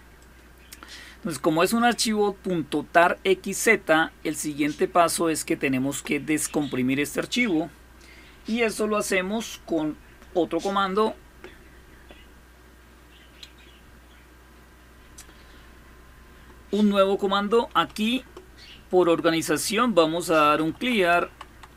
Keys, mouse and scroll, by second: 0.0 click, 1.2-3.1 drag, 4.1 click, 6.7 click, 12.1-13.7 scroll down 2, 13.7-14.4 scroll down 1, 18.7 click, 19.9-21.7 typing.